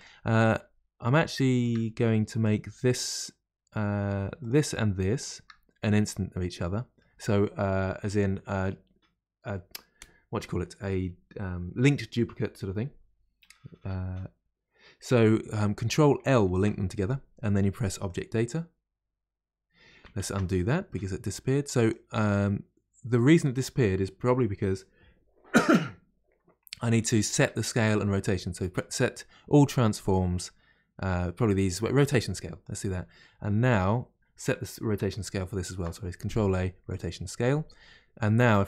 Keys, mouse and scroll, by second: 0.0 click, 0.6 scroll up 5, 1.4 shift+middle click, 1.8-2.4 scroll down 2, 2.4 click, 2.7-4.4 middle drag, 4.4 click, 5.2 shift+click, 5.8-8.8 middle drag, 16.4 ctrl+l, 18.1 ctrl+l, 20.2 ctrl+z, 20.9-21.8 middle drag, 21.8 click, 27.6 ctrl+a, 33.7 click, 35.7 ctrl+a, 37.0 ctrl+a, 38.4 shift+click.